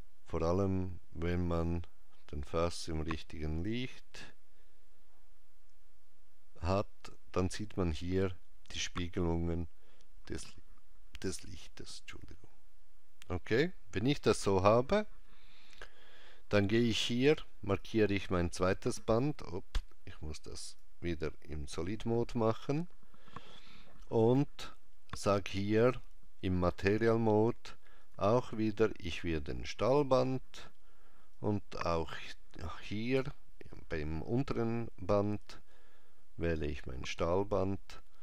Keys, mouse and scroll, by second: 17.7 click, 20.7 click, 21.8 click, 28.1 click, 31.4 click, 35.5 click.